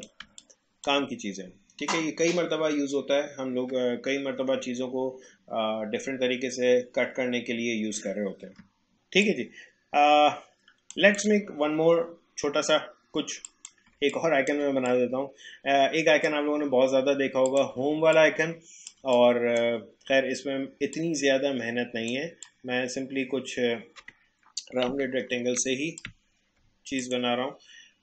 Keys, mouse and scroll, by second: 0.2 space, 0.4-2.9 drag, 2.9 space, 8.6 alt+space, 8.9-11.1 drag, 13.4 click, 13.9 space, 14.1 click, 14.4 space, 14.8-17.5 drag, 17.9 space, 18.1 click, 18.4 space, 19.2-24.9 drag, 24.9 Up, 27.0 click.